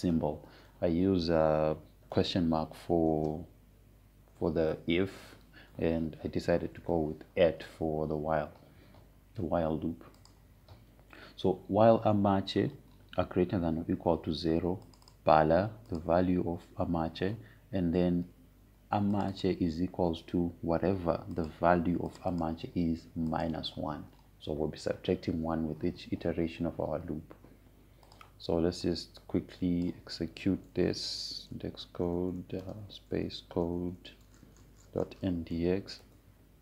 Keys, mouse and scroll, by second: 2.4 BackSpace, 4.8 shift+/, 7.4 BackSpace, 8.2 shift+2, 11.9 click, 16.5 click, 20.8 click, 29.8-32.6 drag, 32.3-36.6 typing.